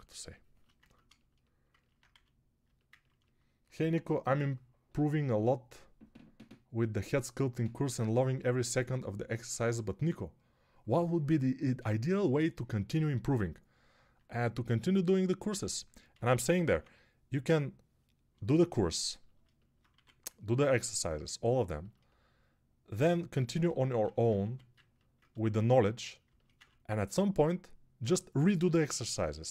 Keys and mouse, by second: 2.0 1, 16.0 g, 16.4 ], 16.6 ], 19.8 1, 24.3 1.